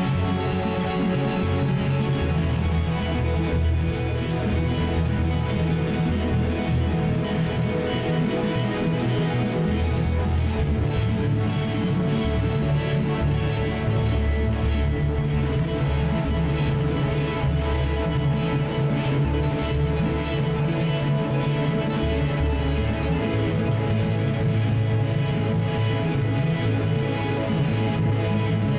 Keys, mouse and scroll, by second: 1.8-4.7 right drag, 5.6-7.8 right drag, 7.8 F1, 8.9-10.5 right drag, 9.7 F1, 11.6 Tab, 17.7 F1, 22.3 F1, 24.5 F1, 26.0-27.3 right drag, 26.7 F1.